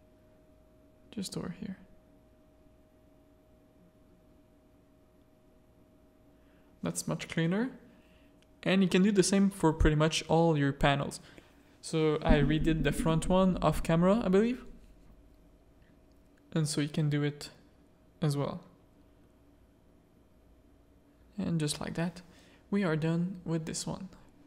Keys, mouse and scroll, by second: 1.0-2.9 drag, 3.0 Tab, 3.3 alt+a, 3.7 z, 9.9 middle click, 12.2 middle click, 14.7 middle click, 14.8 z, 15.1 middle click, 15.5-16.6 middle drag, 16.7 z, 17.9-20.1 middle drag, 20.7-22.0 middle drag, 22.3 ctrl+s.